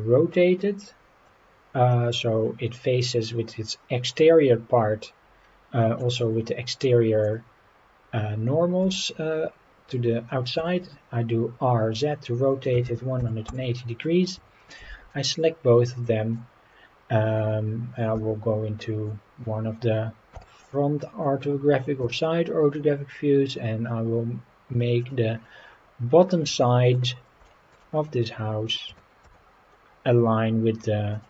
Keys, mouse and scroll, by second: 1.9-6.0 middle drag, 6.8 middle click, 8.8 r, 12.7 KP_1, 12.8 KP_8, 13.2 KP_0, 13.4 Return, 14.7 shift+click, 15.1-16.3 middle drag, 18.1 KP_1, 20.3 g, 25.0 click, 25.3-25.8 scroll up 4, 26.6-26.9 shift+middle drag, 27.4 shift+middle drag, 27.9 scroll up 1, 28.9 g, 29.2 z, 31.1 click.